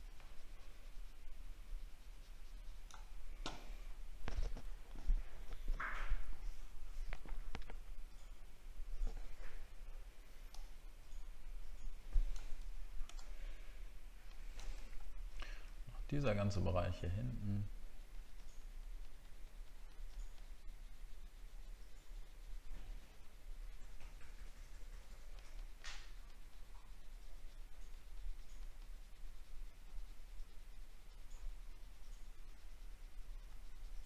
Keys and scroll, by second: 15.1 alt+scroll down 1.